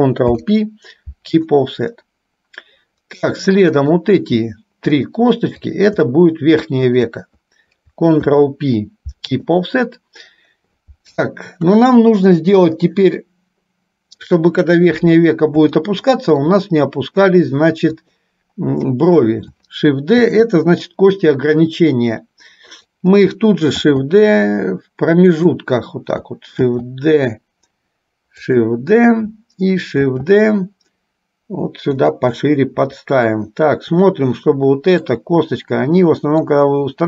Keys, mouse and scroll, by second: 0.3 ctrl+p, 2.2-3.5 middle drag, 3.8 click, 5.2-6.3 shift+drag, 7.1 shift+click, 8.5 ctrl+p, 11.7 KP_1, 16.1 shift+middle click, 20.3 shift+d, 24.0 shift+d, 30.1 shift+d, 32.6-35.3 middle drag, 36.6-37.0 drag.